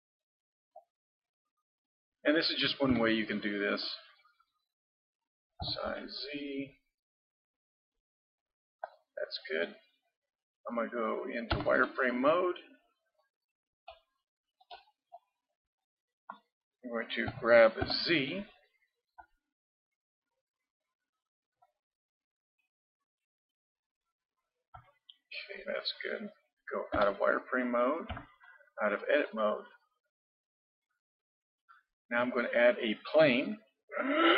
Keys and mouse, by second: 5.6 s, 11.5 z, 12.4-13.5 middle drag, 14.4-17.3 middle drag, 17.3 g, 22.0 middle click, 27.0 z, 28.1 Tab, 29.2-31.3 middle drag, 32.6-34.3 middle drag.